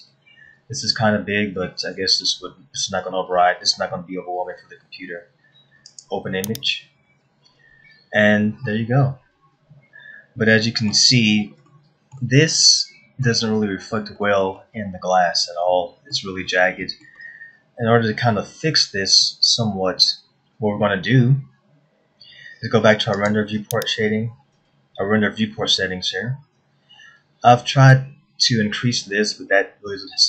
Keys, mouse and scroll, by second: 9.3 middle click, 12.3 shift+middle click, 13.1 middle click, 14.4-14.7 scroll up 2, 14.8 middle click, 15.9 scroll down 1, 16.3 middle click, 17.1 middle click, 19.6 middle click, 23.7 click.